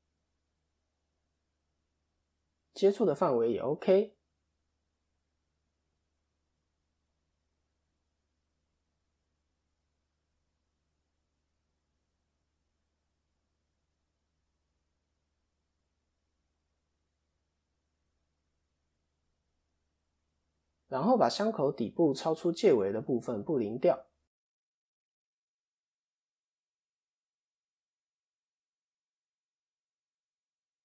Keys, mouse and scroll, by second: 0.2 middle click, 1.1 middle click, 1.1-1.4 scroll down 4, 1.6 scroll up 1, 1.8 middle click, 4.1 middle click, 4.9-5.5 scroll down 2, 5.5-6.2 scroll down 1, 5.5 KP_7, 6.2 KP_3, 7.2 click, 7.4-8.5 scroll down 2, 8.5 scroll down 1, 8.9 shift+middle click, 9.1 shift+scroll up 1, 10.7 click, 11.9 click, 14.9 click, 15.2 click, 15.6 scroll down 5, 15.7 middle click, 15.7 scroll up 1, 18.2 middle click, 19.1 KP_7, 20.0 KP_4, 20.7 KP_1, 21.5-22.2 scroll up 1, 22.2-22.9 scroll up 2, 23.0 shift+a, 29.0 scroll down 1, 29.6-30.8 click.